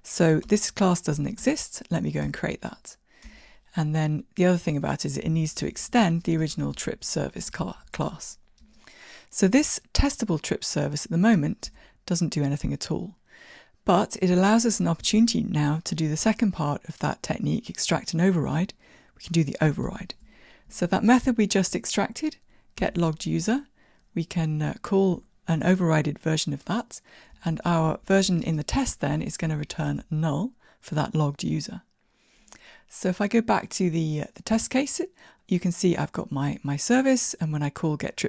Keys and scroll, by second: 4.8 alt+Return, 6.1 Tab, 20.2 ctrl+o, 23.1 Down.